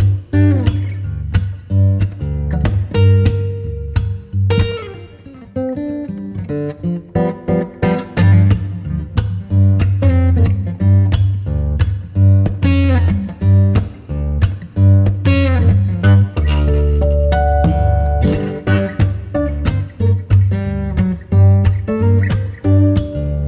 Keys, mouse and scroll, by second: 2.6-9.5 drag, 9.7-14.6 drag, 15.2 middle click, 15.8 Tab, 16.4-17.7 shift+middle drag, 17.7 r, 21.2 r.